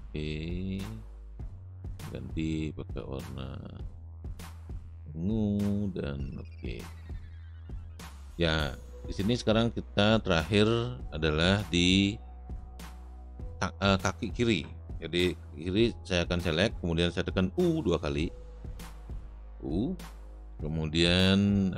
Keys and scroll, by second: 18.7 u, 18.9 u.